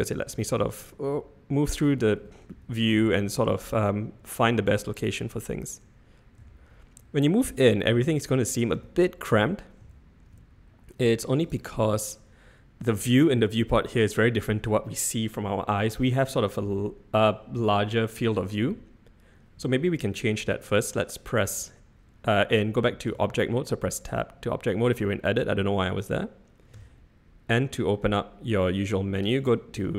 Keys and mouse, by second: 3.9-6.9 shift+middle drag, 6.9-11.5 shift+drag, 23.1 Tab, 26.7 n, 29.4 click.